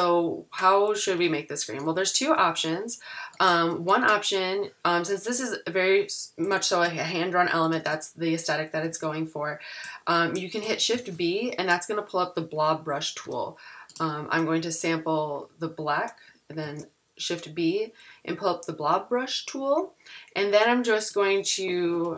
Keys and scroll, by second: 1.1 super+=, 6.5 super+-, 7.7 super+=, 10.9 b, 13.2 i, 16.6 b.